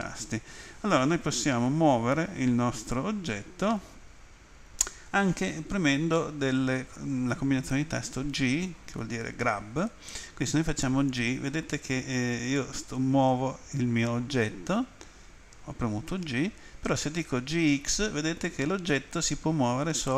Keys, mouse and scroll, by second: 17.7 x.